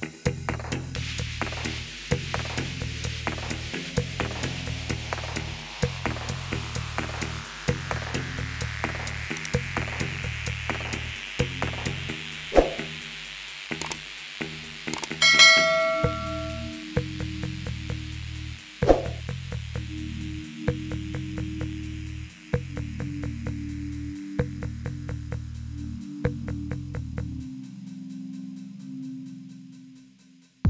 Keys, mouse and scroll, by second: 0.1 click, 1.8 click, 3.0 click, 3.7 click, 4.8-7.0 typing, 8.6 BackSpace, 9.5 Return, 10.0 Return, 11.4-12.4 typing, 14.1 Return, 14.1 typing, 14.5 Return, 15.0 Return, 16.4-19.2 typing, 19.6 click, 20.1 click, 21.3 click, 22.7 click, 23.5 click, 24.9-25.7 typing, 25.7 Return, 27.1 click, 28.7 s, 30.5 click.